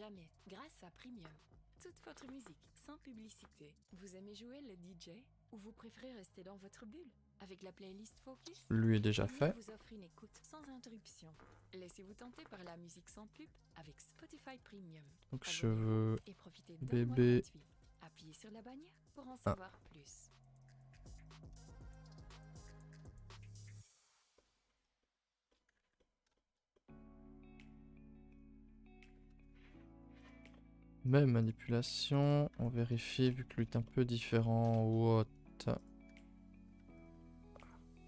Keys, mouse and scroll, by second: 0.5 Tab, 0.7 a, 0.9 a, 1.7 n, 2.8 alt+h, 3.2 a, 3.3 a, 3.4 middle drag, 3.6 ctrl+s, 3.9-5.1 shift+middle drag, 5.1 click, 5.4 Tab, 5.8 a, 8.7 Tab, 8.9 a, 9.1 a, 11.9 click, 13.4-19.1 drag, 19.1 BackSpace, 21.2 click, 21.6 shift+middle drag, 21.9 a, 22.0 a, 22.1-22.8 middle drag, 22.8-23.5 scroll up 8, 23.1 shift+middle click, 23.5-24.1 middle drag, 24.1-25.0 scroll down 5, 24.3 middle drag, 25.0-28.3 middle drag, 28.3 click, 29.3 ctrl+i, 29.4 h, 30.2 click, 31.5-31.9 drag, 32.2 click, 32.5 Tab, 32.7-33.4 middle drag, 33.4 scroll up 2, 33.5 a, 33.7 a, 33.8 middle click, 34.2 1, 34.4 middle click, 35.3-35.8 scroll up 1, 35.8 click, 36.0 g, 37.0 click, 37.2 g.